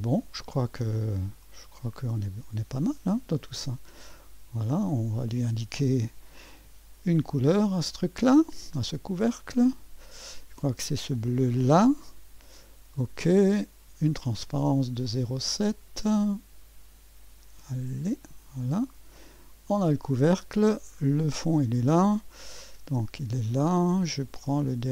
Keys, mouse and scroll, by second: 1.4 middle click, 2.0-3.1 drag, 3.1 middle click, 3.3-4.0 drag, 4.0 middle click, 4.6-6.7 drag, 4.6 typing, 7.6 ctrl+d, 8.8 click, 9.5 click, 10.0-11.3 drag, 11.5-12.9 drag, 13.1-14.4 drag, 18.0-22.8 drag, 22.8 space.